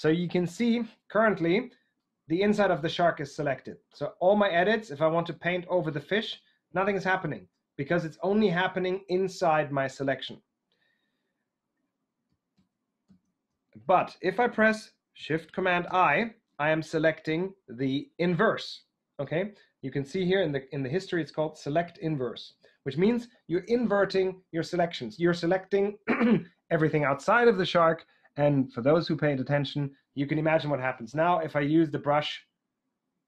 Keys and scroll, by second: 12.4 super+z, 13.0 super+z, 15.7 shift+super+i.